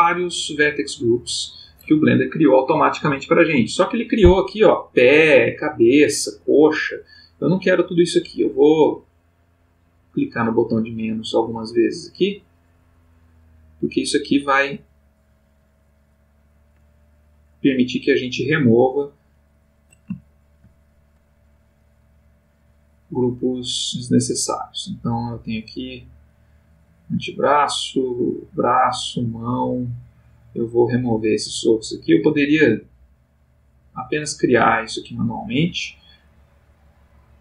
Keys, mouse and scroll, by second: 9.1 click, 11.2 click, 11.7 click, 13.0-13.7 drag, 14.0 click, 14.9 click, 17.3 click, 18.7-19.4 drag, 19.6 click, 20.2 shift+click, 20.9 shift+click, 22.2 click, 23.5 click, 24.8 click, 26.2 click, 27.0 click, 27.7 click, 28.6 click, 29.2 click, 29.9 click, 30.5 click, 31.2 click, 31.9 click, 32.7 click, 33.6 click, 34.3 click, 34.9 click, 35.8 click, 36.2 click, 37.0 click.